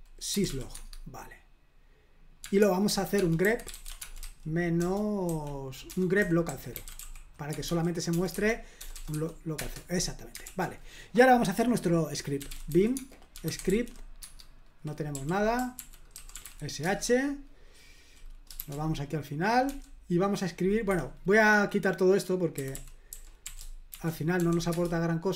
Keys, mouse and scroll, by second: 0.0-1.0 typing, 2.4-9.1 typing, 9.6 Return, 10.4 super+l, 12.2-16.9 typing, 14.2 Tab, 18.6 shift+g, 19.7 o, 20.9 Escape, 22.3-24.9 typing.